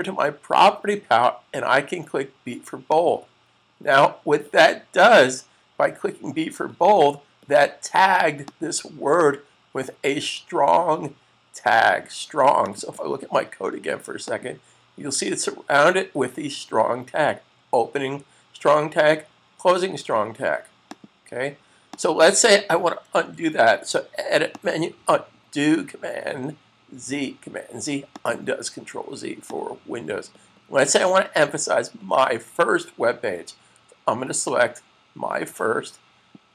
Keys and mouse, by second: 2.8 click, 8.3 click, 12.5 click, 20.9 click, 24.4 click, 28.1 click, 34.2 click.